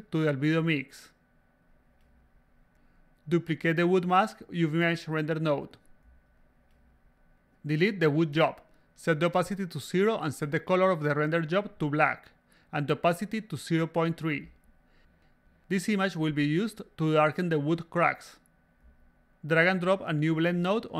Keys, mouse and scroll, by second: 1.8 click, 1.8 a, 3.6 click, 4.3 s, 4.4-5.9 drag, 7.1 click, 7.3 click, 8.8 click, 10.2-10.7 drag, 11.5 click, 12.2-12.6 drag, 14.2 click, 15.1 3, 19.9 click.